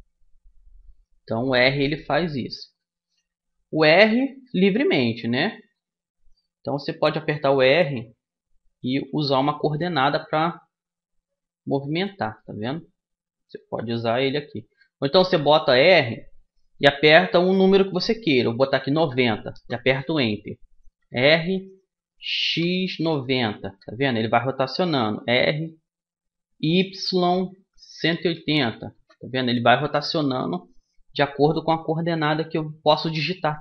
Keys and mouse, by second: 3.6 r, 7.2 r, 12.0-17.0 middle drag, 13.8 r, 20.7 r, 24.8 r, 31.4-33.6 middle drag.